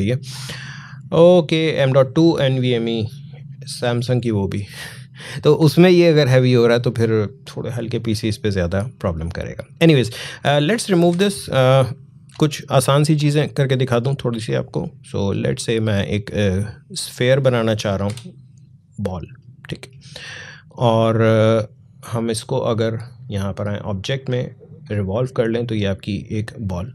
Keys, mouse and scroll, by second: 1.9-6.8 drag, 10.1 click, 10.9 Delete, 13.2-17.9 drag, 17.9 Delete, 23.2 click.